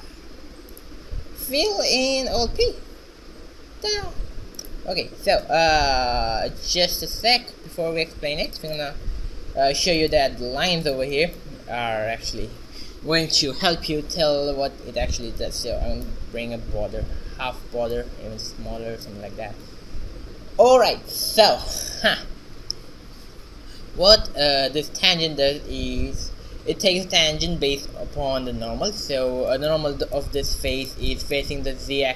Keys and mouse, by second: 0.3 s, 1.5 f, 2.5 alt+p, 3.6 a, 4.3 Tab, 6.5 n, 7.3-9.9 drag, 9.8 a, 14.5 ctrl+b, 17.5 ctrl+b, 19.8 shift+z, 29.1 shift+z, 29.6-32.1 middle drag.